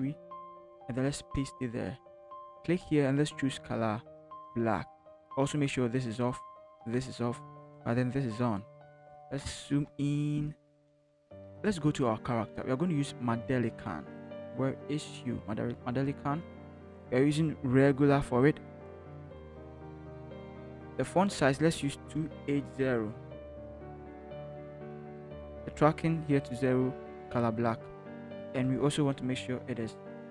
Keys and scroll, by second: 1.0 ctrl+v, 9.4 ctrl+=, 9.7 ctrl+=, 23.9 8, 24.2 0, 24.6 Return, 28.6 ctrl+t, 29.9 ctrl+h.